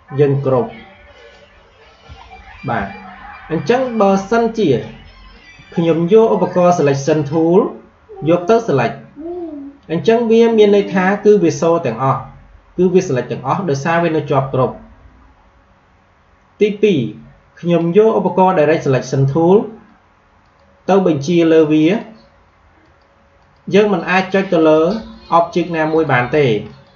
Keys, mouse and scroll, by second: 2.1 alt+scroll down 1, 2.8 scroll up 2, 3.7 click, 4.6 space, 4.7 click, 5.0 space, 8.5 click, 20.3 click.